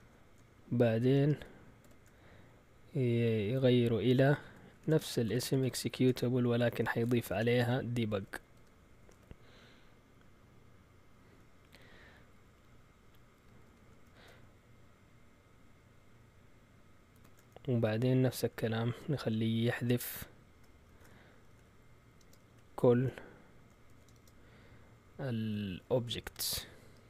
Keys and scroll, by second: 0.0-1.8 typing, 4.7-6.3 typing, 6.7 shift+Tab, 7.4-9.6 typing, 12.5-13.9 typing, 17.1 @, 18.5 End, 19.1 Return, 20.9-22.4 typing, 23.6-24.4 typing, 26.0-27.0 typing.